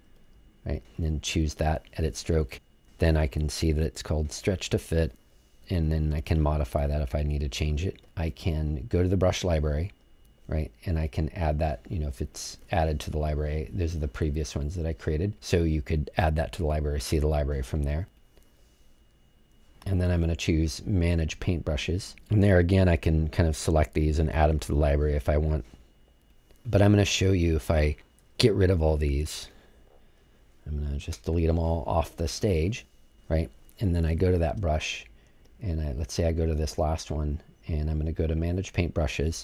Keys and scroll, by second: 31.0 BackSpace, 34.0 BackSpace.